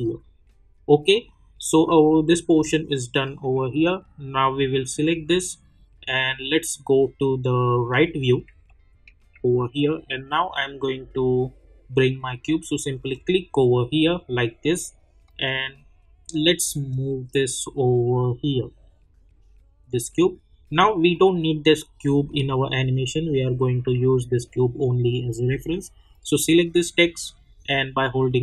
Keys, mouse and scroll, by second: 1.1 click, 2.0 scroll down 1, 2.7-4.8 alt+drag, 6.0 middle click, 8.6-11.5 alt+middle drag, 13.1-21.1 drag, 26.2 click.